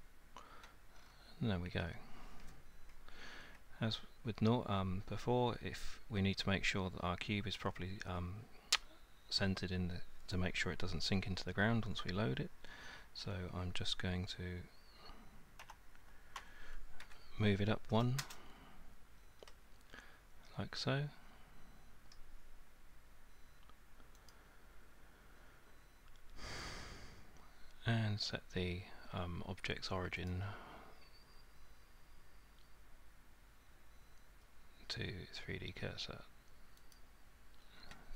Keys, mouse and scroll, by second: 1.0 scroll, 1.7-3.2 scroll, 15.6 g, 16.4 z, 17.0 1, 18.2 Return, 19.5 middle click, 22.1 middle click, 24.3 click, 30.3 click, 36.9 click.